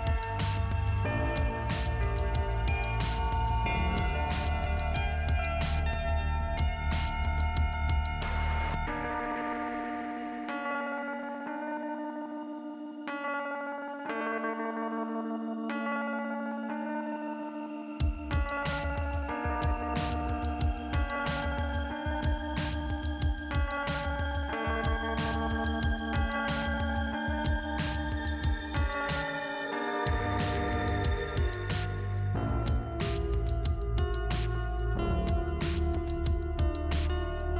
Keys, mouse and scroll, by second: 0.4 click, 4.2-4.8 scroll up 2, 6.8 click, 10.7 click, 10.9 click, 11.6-12.8 scroll down 2, 13.0 click, 14.4 scroll down 1, 14.5 p, 14.6 p, 16.8 middle click, 18.1 click, 19.2 click, 19.9-20.9 scroll up 2, 20.9 click, 23.3-23.9 scroll up 1, 24.4 click, 26.3 click, 26.8 click, 26.8 click, 28.3 middle click, 29.1 scroll up 1, 29.9 click, 31.3 click, 33.9 click, 34.9 click, 36.2 click, 36.9 click.